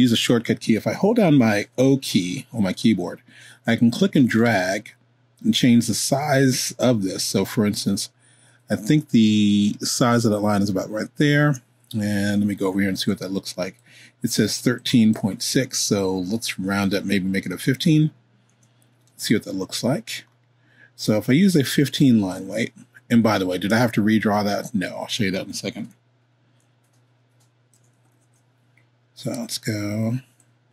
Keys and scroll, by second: 2.5 o, 17.3 1, 17.6 5, 18.5 Return, 28.1 super+z.